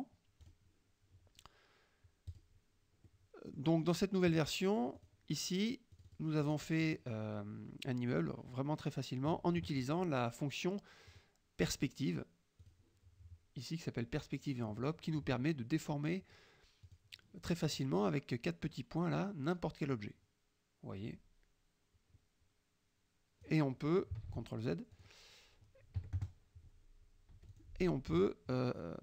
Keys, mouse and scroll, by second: 0.5 click, 2.4 click, 3.2-5.0 middle drag, 5.0 click, 5.3 middle click, 6.0-6.8 drag, 6.5 middle click, 11.2 click, 12.7 click, 14.8-16.9 middle drag, 16.9 click, 20.0-23.8 drag, 24.3 ctrl+z, 25.0 click, 26.0 KP_Subtract, 26.3 KP_Add, 27.4 F1, 27.6 click.